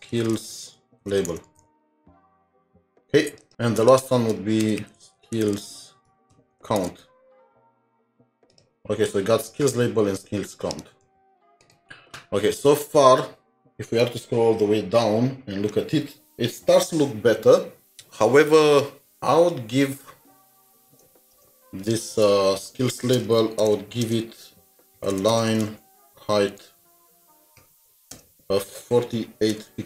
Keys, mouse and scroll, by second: 0.0-2.3 typing, 3.5 double click, 4.7-7.4 typing, 10.8 typing, 10.8 ctrl+c, 17.9 typing, 20.9 Return, 21.3 Return, 22.2 typing, 23.6 typing, 24.0 Return, 25.2-27.6 typing, 28.1 Return, 29.4-29.8 typing.